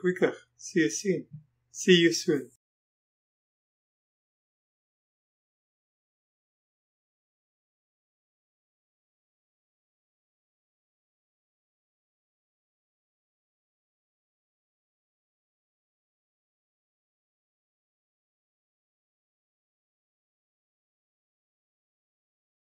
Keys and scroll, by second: 17.6 space.